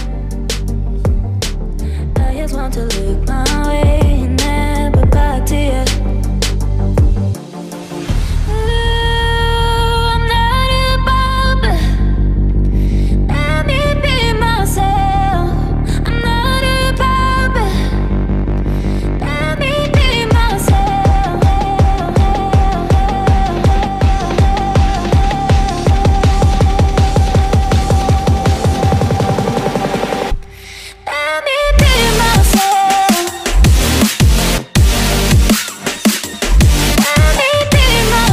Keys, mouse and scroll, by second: 9.2 ctrl+v, 9.9 ctrl+v, 28.9 ctrl+click, 31.1 double click.